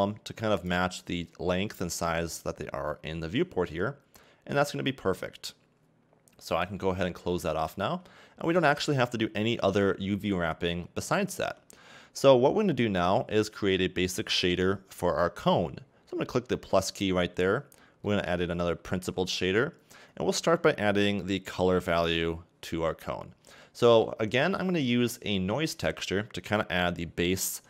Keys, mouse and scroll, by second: 7.2 click, 8.9 a, 9.0 a, 11.4 Tab, 17.1 click.